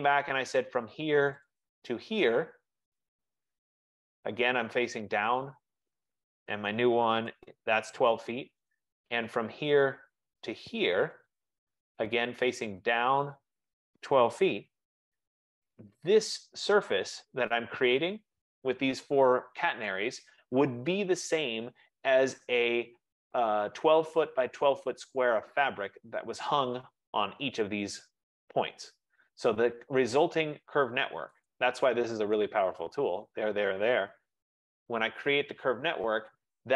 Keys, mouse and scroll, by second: 1.6 click, 3.2 click, 5.3 click, 6.7-7.5 typing, 8.8 right click, 10.0 click, 11.3 click, 13.4 click, 14.4-15.3 typing, 18.2 right click, 29.2 right click, 30.2 shift+click, 31.6 right click, 32.4 shift+right click, 33.3 shift+right click, 34.4-34.8 typing, 35.2 shift+click.